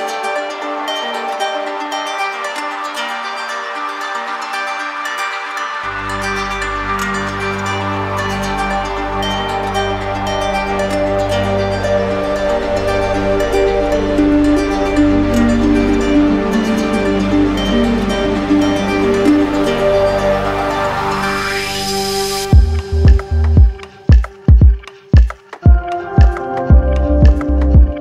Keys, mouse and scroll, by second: 0.1 alt+click, 1.0 alt+click, 2.1 alt+click, 3.1 shift+click, 3.7 shift+click, 4.2 shift+click, 4.6 shift+click, 4.9 shift+click, 5.6 shift+click, 6.4 click, 7.1 right click, 10.4 shift+click, 11.2 shift+click, 11.7 right click, 13.2 shift+click, 13.6 right click, 14.3 shift+click, 14.8 shift+click, 15.1 shift+click, 16.2 shift+click, 16.4 shift+click, 17.1 click, 17.4 shift+click, 18.2 alt+click, 18.8 right click, 20.7 right click, 23.7 alt+click, 24.4 ctrl+z, 27.2 alt+click, 27.9 ctrl+z.